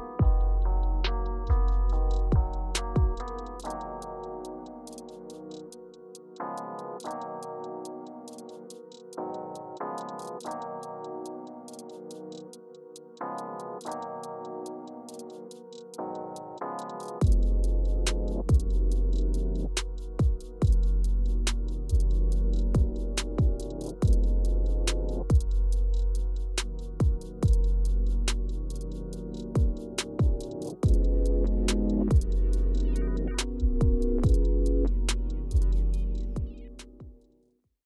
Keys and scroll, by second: 3.8-4.8 typing, 24.7 Return.